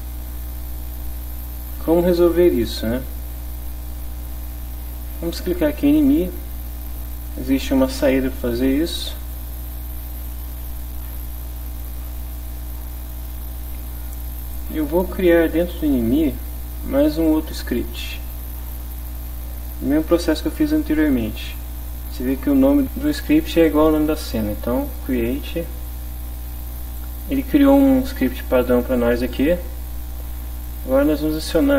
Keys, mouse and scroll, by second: 5.9 click, 9.2 click, 10.1 click, 10.9 click, 13.7 click, 16.2 click, 18.2 click, 22.6 click, 25.1 click, 28.6 click, 29.3 click, 30.6 click, 31.6 click.